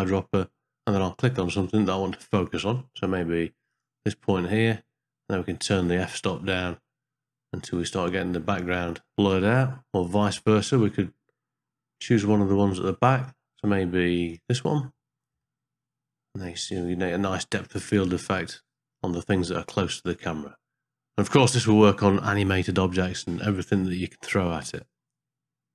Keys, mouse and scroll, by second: 6.2-9.3 shift+drag, 11.7 e, 15.4-16.6 ctrl+middle drag.